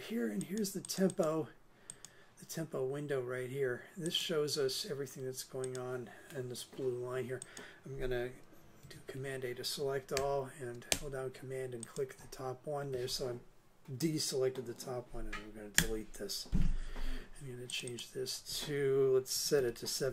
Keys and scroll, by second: 8.8 super+a, 15.7 BackSpace, 19.1-20.1 typing.